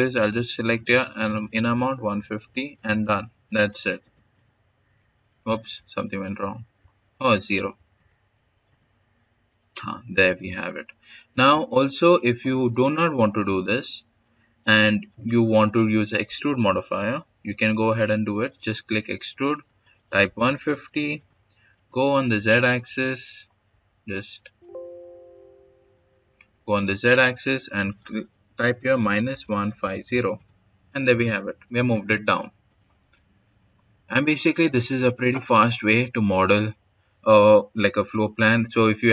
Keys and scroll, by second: 1.6-2.8 typing, 5.5 ctrl+z, 7.2-8.7 typing, 10.5-13.9 typing, 19.8-26.4 typing, 28.5-30.3 typing.